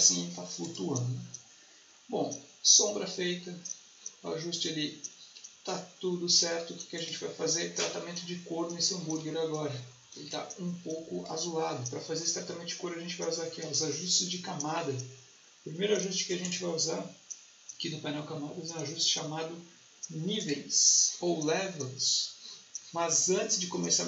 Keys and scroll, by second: 10.1 space.